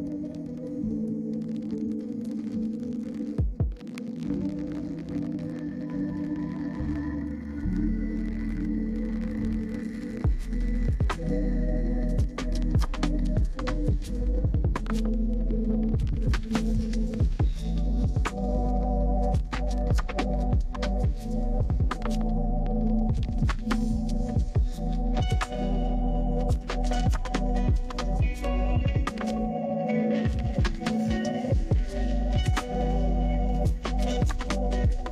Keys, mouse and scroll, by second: 2.6 click, 4.5 2, 5.9 click, 6.9 1, 7.2 5, 10.1 click, 11.0-12.0 typing, 12.4 click, 13.0-13.9 typing, 14.9 click, 17.3-17.7 scroll down 2, 18.4 middle click, 20.4-21.9 right drag, 22.2 middle click, 25.6 middle click, 25.6-26.0 scroll up 2, 26.0 scroll down 2, 26.2-26.6 scroll up 1, 26.6 middle click, 29.6 click, 30.9 d, 31.7 click, 32.8-33.9 typing.